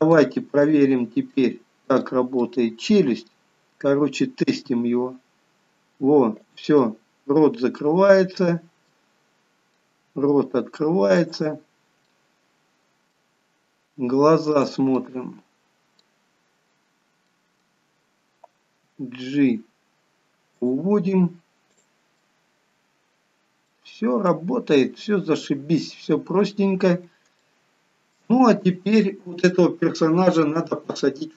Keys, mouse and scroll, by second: 0.2-0.9 scroll up 1, 0.9 click, 1.5 middle click, 2.6 middle click, 3.3-3.9 scroll up 2, 4.8 r, 7.0 middle click, 9.2 middle click, 10.3 r, 12.2 middle click, 14.7 click, 15.3 middle click, 17.5 middle click, 19.1 g, 22.0 click, 22.4 middle click, 25.0 middle click, 26.2-27.0 scroll down 8, 27.6 scroll down 1, 27.7 shift+middle click.